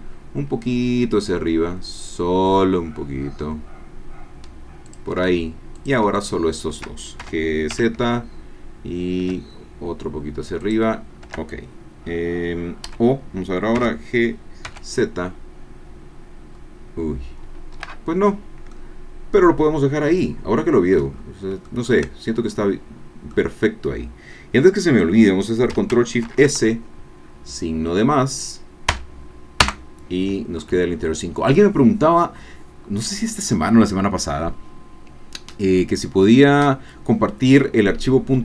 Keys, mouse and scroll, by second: 4.9 shift+click, 5.8 shift+click, 6.2 shift+click, 7.2 shift+g, 7.7 shift+z, 10.6 click, 11.8 Caps_Lock, 12.8 o, 13.7 g, 14.7 z, 15.5-16.2 scroll down 4, 16.5 scroll up 1, 17.6 Escape, 18.3 scroll down 1, 18.7-21.2 drag, 21.2 scroll down 1, 21.6-24.8 shift+drag, 26.3 ctrl+shift+s, 28.9 KP_Add, 29.6 KP_Enter.